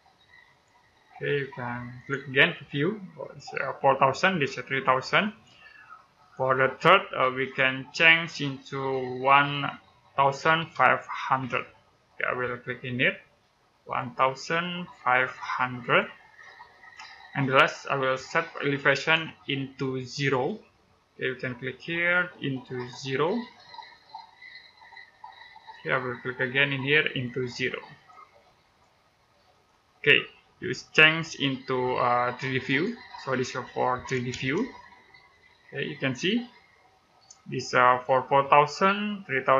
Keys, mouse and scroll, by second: 6.1 click, 9.0 typing, 10.4-11.5 typing, 13.8 click, 20.2 typing, 23.0 click, 32.5 click, 34.3 middle click.